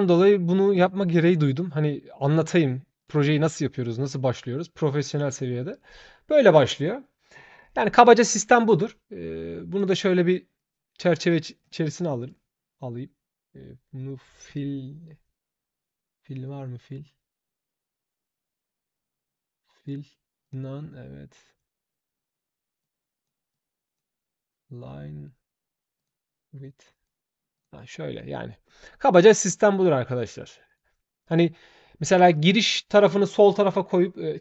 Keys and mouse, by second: 2.8 shift+click, 4.0-5.2 shift+drag, 5.5 shift+click, 7.4 shift+click, 9.5 shift+click, 10.3-11.3 shift+drag, 11.7 shift+click, 12.0 click, 19.6 click, 20.2 click, 22.6 click, 23.3 shift+click, 25.7 shift+click, 26.6 shift+click, 27.3 shift+click, 30.4 shift+click.